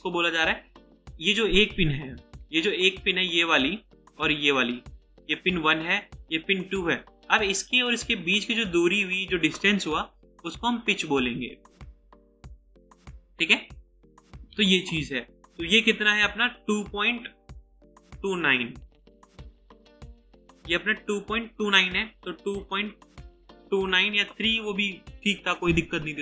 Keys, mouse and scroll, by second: 22.3 typing, 23.6-23.9 typing.